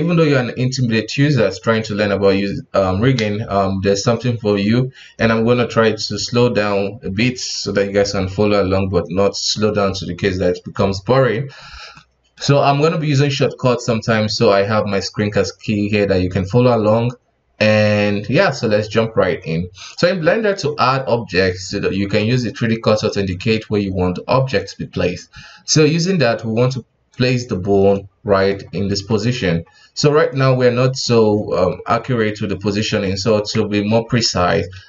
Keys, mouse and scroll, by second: 11.9-15.0 middle drag, 16.2-16.7 scroll up 1, 18.4-18.7 scroll down 1, 18.7-19.1 middle drag, 19.1 scroll up 1, 19.2 KP_1, 19.9 click, 20.3-22.0 scroll down 1, 22.0 scroll down 1, 22.1-23.0 drag, 25.5-27.1 scroll up 4, 27.1 click, 27.6 scroll down 2, 27.9-28.6 middle drag, 28.6 scroll up 3, 28.8 KP_1, 29.6-30.3 scroll down 1, 30.3-30.7 middle drag, 30.7-32.7 scroll up 1, 32.7-33.0 scroll up 1, 33.0 middle click, 33.5-34.0 scroll up 1, 34.0 Tab, 34.5 alt+a.